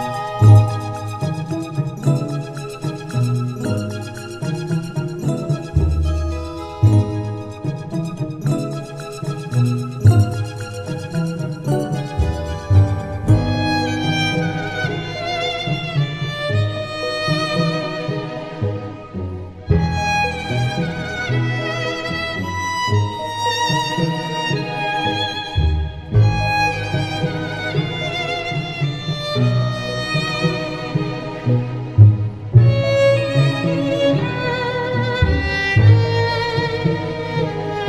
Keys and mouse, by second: 6.4 middle click, 8.0 right click, 9.1 right click, 12.4 right click, 14.7 middle click, 16.3 right click, 20.8 middle click, 21.5 middle click, 24.9 middle click, 28.2 middle click, 28.9 middle click, 30.0 middle click, 32.2 middle click, 34.6 right click, 35.6 right click.